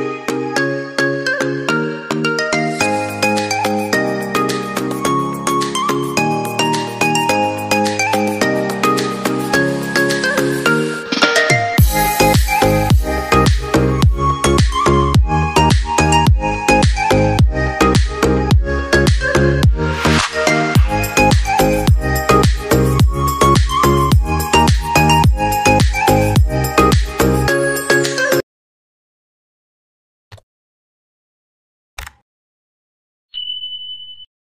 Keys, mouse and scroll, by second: 8.2 right click, 11.0 right click, 15.3 double click.